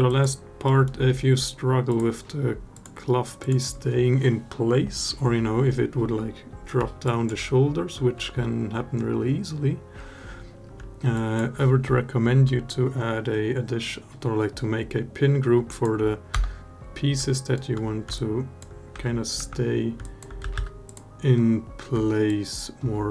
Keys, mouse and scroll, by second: 0.4 alt+middle drag, 1.7 click, 2.5 click, 3.2 click, 6.8 alt+drag, 10.9 alt+click, 15.5 click, 16.1 Tab, 17.1 alt+middle click, 17.9 alt+click, 18.7 1, 19.1 3, 19.8 alt+click, 20.2 a, 20.3 a, 20.6 click, 22.0 alt+click.